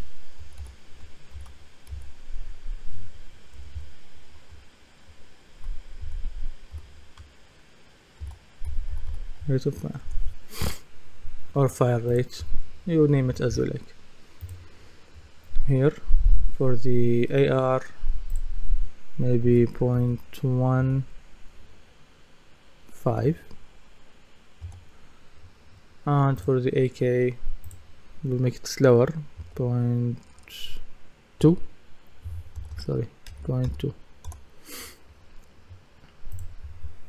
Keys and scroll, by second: 0.0-0.4 typing, 3.6 BackSpace, 6.0 BackSpace, 6.7 f, 8.4-9.6 typing, 19.4 KP_0, 19.9 KP_Decimal, 23.2 KP_5, 24.6 Return, 29.4 KP_0, 31.4 KP_2, 32.6 BackSpace, 33.3 KP_Decimal, 34.3 Return.